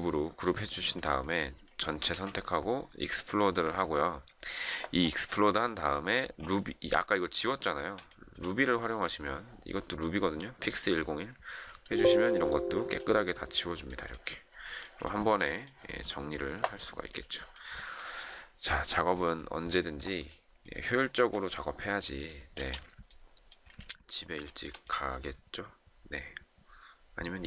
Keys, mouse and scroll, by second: 2.0 ctrl+a, 6.1 ctrl+a, 8.0 shift+middle click, 15.0 shift+middle click, 21.0 Escape, 22.5 space, 24.4 shift+middle click.